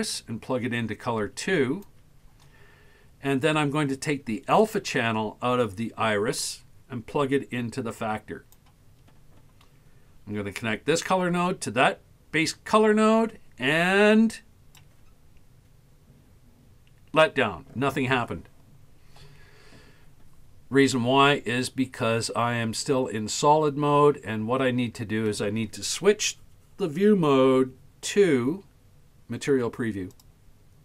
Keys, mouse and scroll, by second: 4.6-8.7 drag, 11.0-14.9 drag, 30.2 click.